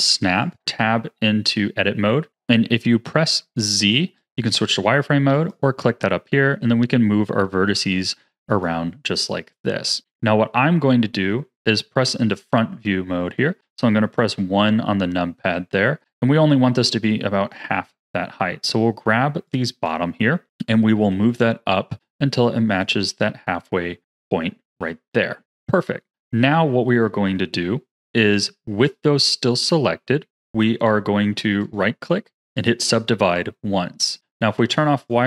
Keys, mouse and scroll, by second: 0.4 click, 0.6 Tab, 5.3 click, 6.4 g, 10.1-13.3 middle drag, 14.1 KP_1, 15.3-16.1 scroll up 2, 17.0 click, 19.4 click, 20.9 g, 23.0-24.6 scroll down 3, 24.6 g, 25.7-28.2 middle drag, 29.5-31.6 middle drag, 31.6-34.3 right drag, 34.9 click.